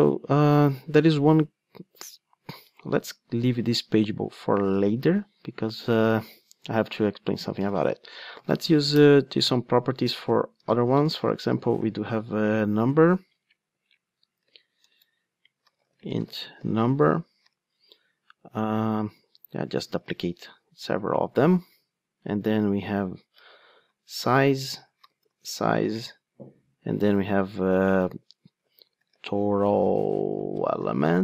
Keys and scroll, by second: 0.8 Return, 9.0 Return, 19.7 super+d.